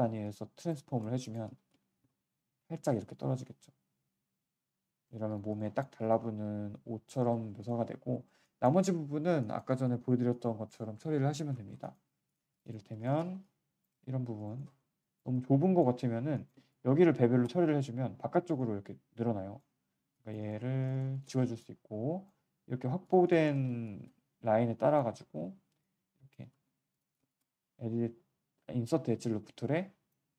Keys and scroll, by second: 1.4 ctrl+z, 5.1 q, 26.5 z.